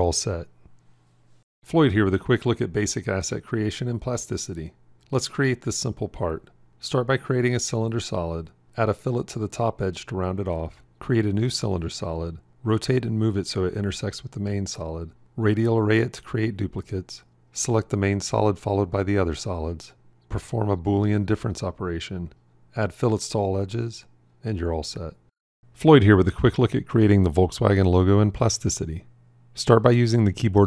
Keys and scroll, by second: 21.0 q, 29.4 shift+c.